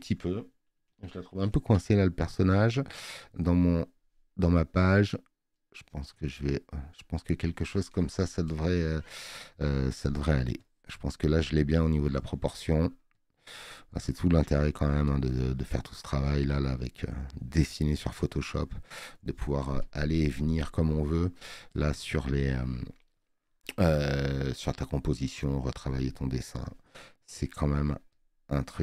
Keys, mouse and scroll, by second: 3.2 click, 12.0 space.